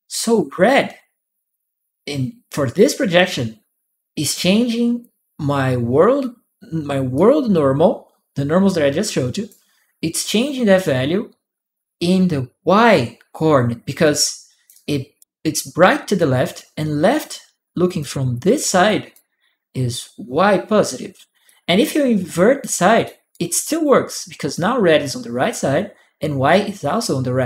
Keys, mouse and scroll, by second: 6.9-9.2 drag, 13.8 click, 14.5 right click, 16.9 click, 18.6 click, 21.2-22.8 drag, 23.1 right click, 23.1 click, 23.7 click.